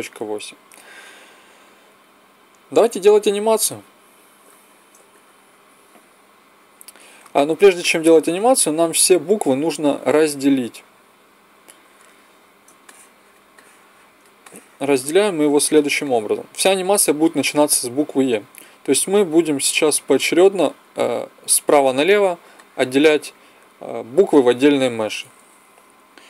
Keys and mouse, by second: 3.3-5.5 drag, 9.7 Tab, 11.8 KP_1.